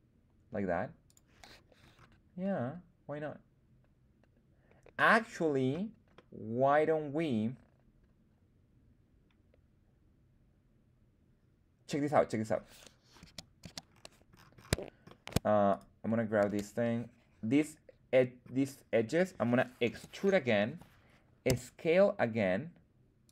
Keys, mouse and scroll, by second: 1.0 click, 1.4-2.6 scroll down 2, 2.6 scroll down 1, 6.1-12.5 middle drag, 13.1 z, 13.5 z, 13.8-14.4 scroll down 2, 14.2-15.0 scroll up 2, 15.0 shift+middle drag, 15.0 scroll up 2, 15.7 right click, 16.4 Tab, 17.5 middle click, 19.8 e, 20.5 Escape, 21.4 s, 23.2 click.